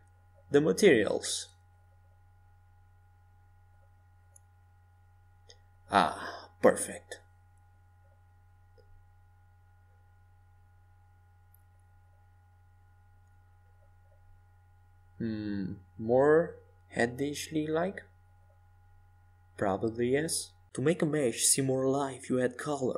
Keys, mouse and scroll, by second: 4.3-7.9 drag, 10.1-13.8 drag, 12.1-14.5 middle drag, 15.9-18.6 typing, 20.6 a, 21.3 Tab.